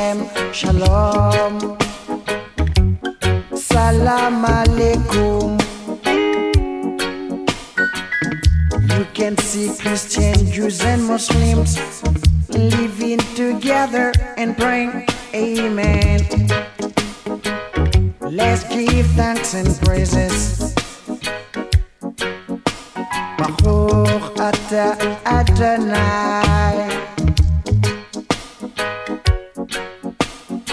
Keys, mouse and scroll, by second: 1.2 click, 5.7-7.3 drag, 11.4 click, 12.9 ctrl+click, 16.0 click, 24.4 click, 28.6-30.1 drag.